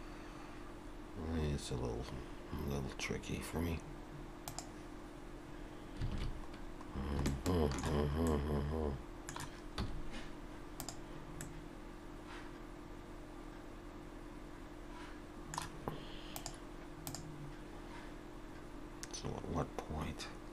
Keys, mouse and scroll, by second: 6.2 alt+a, 6.9 scroll down 2, 7.3 shift+middle click, 8.3 middle click, 9.8 z, 11.4 middle click.